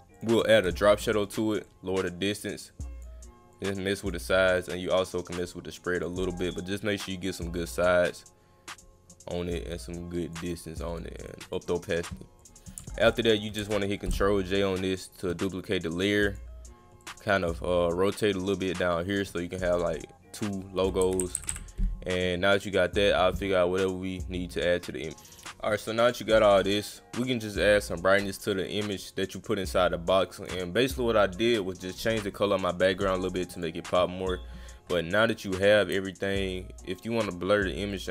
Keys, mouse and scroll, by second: 0.1 click, 1.1 drag, 1.6-3.0 drag, 3.6 click, 4.6 click, 5.9 click, 6.6 click, 8.1 click, 9.4 click, 10.9 click, 11.2 click, 11.5 click, 11.7 click, 12.4 click, 15.0-16.3 shift+drag, 17.0 click, 17.3 click, 18.4 click, 19.7 click, 22.9 click, 23.8 click, 25.2 click, 26.0 click, 26.3 click, 27.5 click, 28.1 click, 28.9 click, 29.5 click, 33.6 click, 37.9 click.